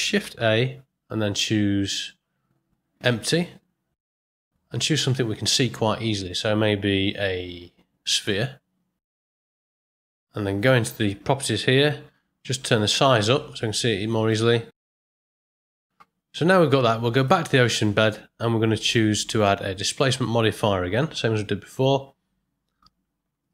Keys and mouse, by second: 0.5 shift+a, 9.1 middle click, 11.0 click, 12.8-14.3 drag, 14.7 middle click, 15.1-15.5 ctrl+middle drag, 17.1 click, 18.8 click, 19.6-23.5 drag.